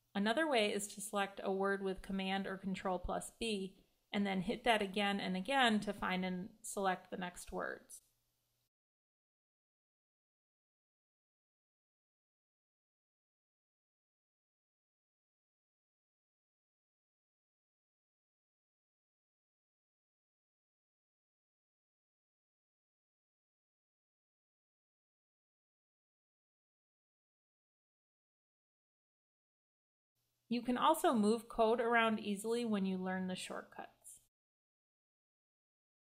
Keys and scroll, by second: 1.2 super+b, 3.0 super+b, 3.7 super+b, 9.7 Delete, 9.9 Delete, 10.3 BackSpace, 10.5 BackSpace, 13.0 Escape, 19.0 super+d, 29.6 super+d, 34.5 ctrl+super+Up, 35.1 ctrl+super+Down, 35.5 ctrl+super+Up.